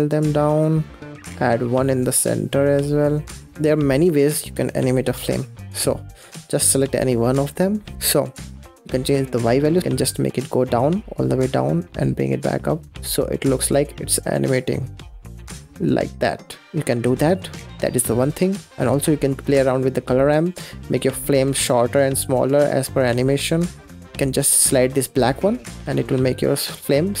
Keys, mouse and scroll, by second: 5.1 click, 6.0 click, 7.3-7.7 scroll down 6, 7.7 middle click, 7.9 ctrl+z, 8.4-10.7 shift+drag, 13.0-15.1 shift+drag, 16.7 ctrl+z, 16.8 middle click, 17.0-17.3 scroll down 5, 17.3-17.8 middle drag, 17.8 scroll up 6, 18.7 middle click, 19.3-21.9 drag, 24.2-27.2 drag.